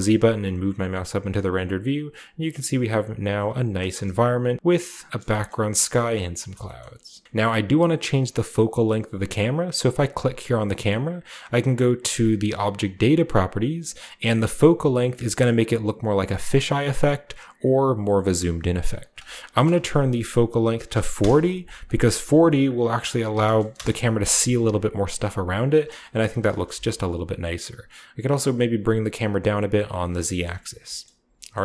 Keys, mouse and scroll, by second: 1.1-6.7 scroll down 1, 6.7 a, 6.8 shift+middle click, 7.2 ctrl+b, 7.2-8.5 ctrl+drag, 9.5-11.2 right drag, 12.7 click, 14.9-18.3 drag, 18.3 middle click, 19.0 click, 20.9 4, 21.1 -, 21.2 Return, 21.8 click, 23.3 typing, 23.7 Return, 26.2-27.4 shift+middle drag, 26.5 g, 26.7 z, 30.0 click, 30.3-31.6 shift+middle drag, 30.9-31.6 shift+scroll up 1.